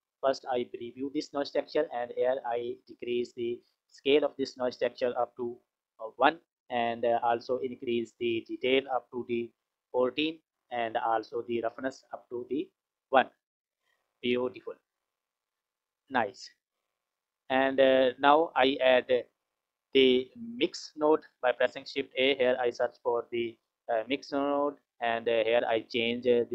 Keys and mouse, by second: 0.9 ctrl+shift+click, 2.3-3.7 drag, 4.6-6.0 drag, 7.7-9.7 drag, 12.1 click, 14.5 click, 15.3 click, 15.5 click, 16.5 click, 17.9 click, 18.7 click, 19.6 click, 21.4 shift+a, 25.9-26.5 drag.